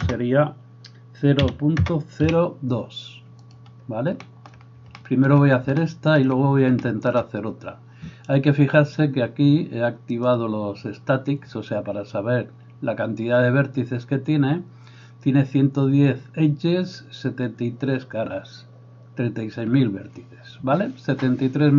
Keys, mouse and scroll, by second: 3.6-10.3 middle drag, 10.3-21.7 drag.